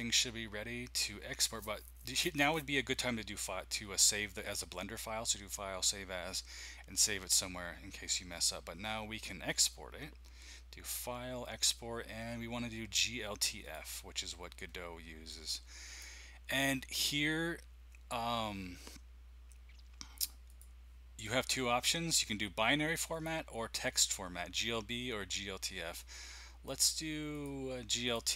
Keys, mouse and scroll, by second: 4.4 click, 13.6 click, 15.3 click, 20.4 click, 23.1 click, 27.3 click, 28.1 click.